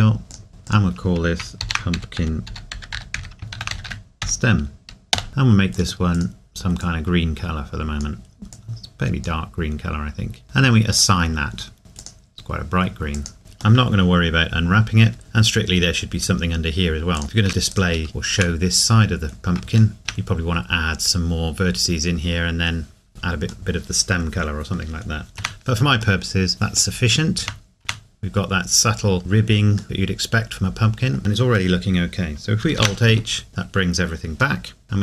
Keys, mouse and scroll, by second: 0.3 click, 2.9-3.4 typing, 7.1 click, 8.9 click, 9.7-10.9 scroll down 2, 10.9-11.6 scroll down 1, 11.6 scroll down 1, 11.8 scroll up 1, 13.4 ctrl+s, 13.8 middle click, 17.2 click, 17.2 ctrl+r, 17.7 right click, 18.1 shift+middle click, 18.7 scroll up 1, 20.0 right click, 23.7 middle click, 23.7 middle click, 24.9 scroll down 1, 26.2 middle click, 27.1-27.4 scroll up 1, 29.8 middle click, 31.2 scroll down 1, 34.6 middle click.